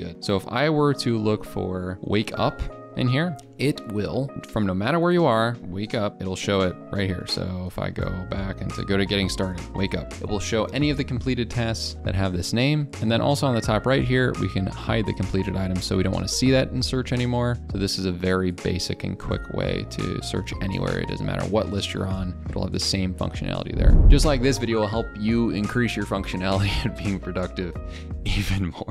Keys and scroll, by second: 5.6 ctrl+f.